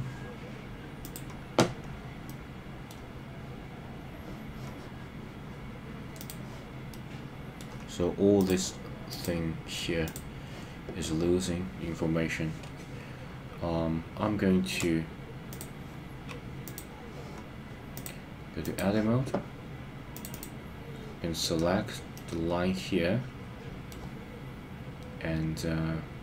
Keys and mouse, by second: 1.1 click, 2.2 middle click, 6.9 middle click, 18.0 click, 20.1 click, 20.3 click, 22.1-23.9 middle drag.